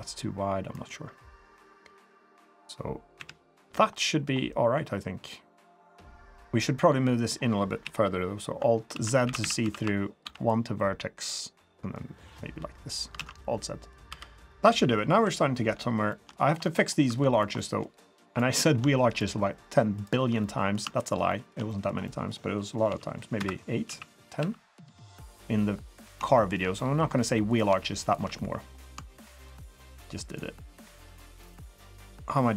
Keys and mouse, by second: 3.2 KP_3, 3.9 middle drag, 5.3-5.7 middle drag, 6.2 middle click, 7.8 KP_1, 8.9 alt+z, 9.2-10.2 typing, 11.8-12.9 drag, 13.2 alt+z, 13.4 middle drag, 13.6 drag, 14.1 3, 14.4 click, 15.2 KP_3, 16.1 shift+drag, 16.6 middle drag, 17.1 2, 17.6 middle click, 18.3 shift+middle drag, 19.9 shift+middle click, 20.4-20.7 middle drag, 21.3 shift+middle click, 21.7 middle click, 22.0 middle click, 22.9 x, 23.9 s, 26.3 shift+click, 26.3 shift+middle click, 26.7 middle click, 27.5 click, 28.0 shift+click, 28.3-28.7 middle drag, 30.7 shift+click, 31.3 shift+click.